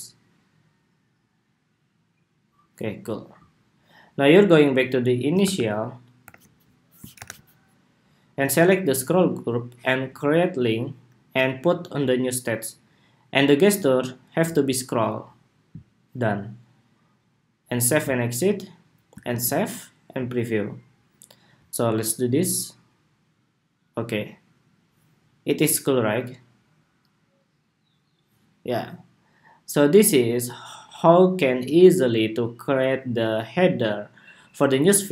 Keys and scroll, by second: 5.9 super+-, 19.0 super+s.